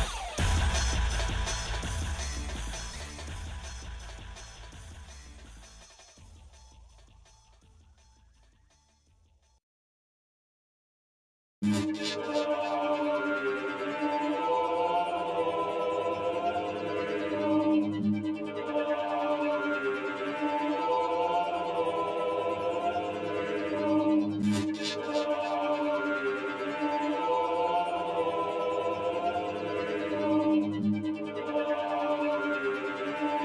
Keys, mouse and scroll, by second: 0.6 shift+middle click, 1.8 scroll up 2, 2.6 shift+middle click, 4.6 g, 5.6 click, 6.6 click, 7.7 g, 13.3-15.6 shift+middle drag, 15.8-17.0 shift+middle drag, 17.2 shift+middle click, 19.0 shift+middle click, 21.2 shift+d, 25.7 shift+middle click, 26.2-26.5 scroll up 2, 27.2 shift+middle click, 29.0 g.